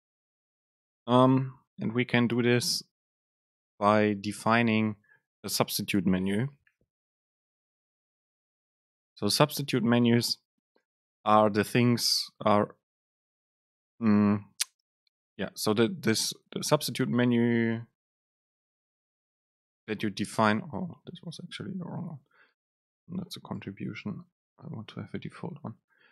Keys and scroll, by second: 23.7 Delete.